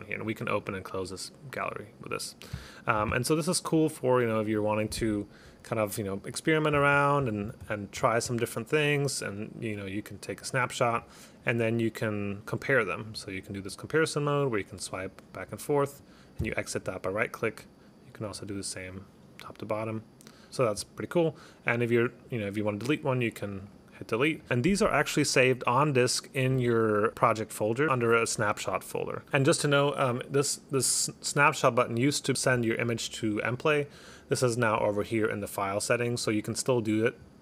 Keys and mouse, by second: 0.3 click, 0.7 click, 1.2 click, 3.8 click, 4.6 click, 6.2 click, 6.4 click, 7.3 click, 8.6 click, 9.3 right click, 10.5 click, 11.5 right click, 12.4 click, 12.7 right click, 13.2 click, 13.8 click, 16.5 right click, 17.5 right click, 18.4 click, 18.7 click, 19.7 right click, 20.5 click, 22.9 right click, 23.8 click, 33.9 click.